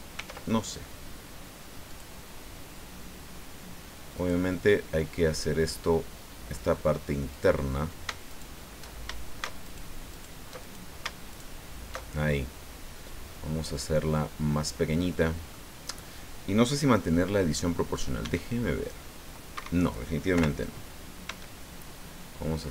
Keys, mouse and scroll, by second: 0.2 ctrl+r, 1.9 click, 4.2 click, 7.3 click, 8.3 alt+shift+right click, 9.6 alt+shift+right click, 10.1 alt+shift+right click, 10.6 alt+shift+right click, 11.3 alt+shift+right click, 13.3-15.7 drag, 18.2 s, 19.5 Escape, 20.3 o, 21.2 s.